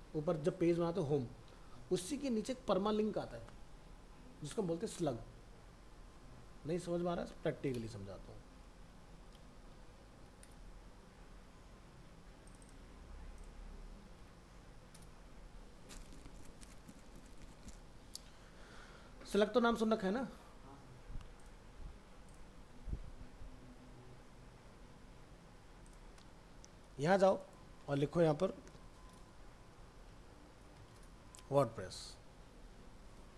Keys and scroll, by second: 28.8 ctrl+shift+Left.